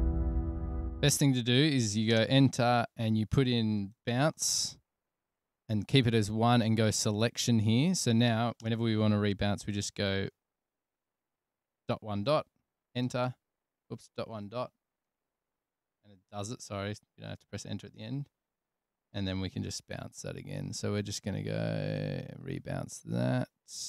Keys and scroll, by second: 0.0 super+], 0.1 super+], 0.3 super+], 0.7 super+[, 2.5 Return, 4.1-6.1 typing, 6.5 Tab, 9.0 Return, 10.7 1, 13.4 Return, 14.3-15.3 typing, 15.4 Return, 19.9 alt+super+b, 21.0 Tab.